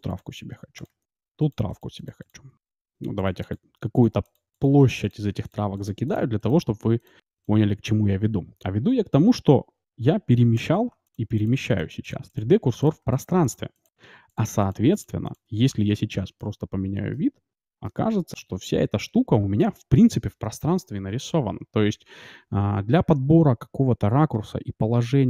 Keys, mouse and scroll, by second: 0.0-7.6 typing, 10.6-17.1 drag, 10.9-12.6 d, 13.0-14.0 d, 14.5-15.4 d, 16.3-19.7 middle drag.